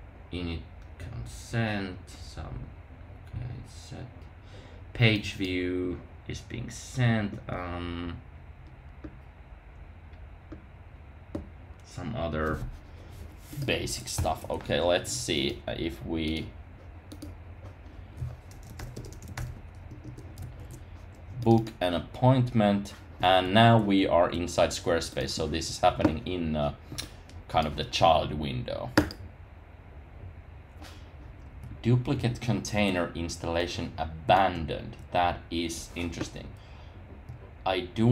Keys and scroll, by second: 14.1 super+k, 18.9 Tab.